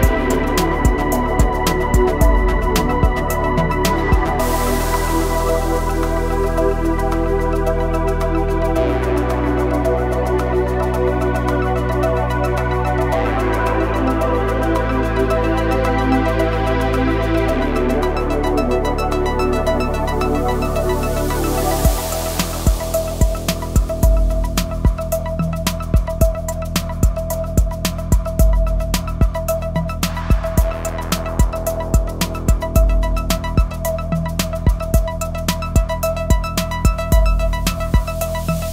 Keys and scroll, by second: 3.9 g, 4.6 z, 8.3 e, 12.6 e, 14.2 s, 18.7 i, 24.6 Tab.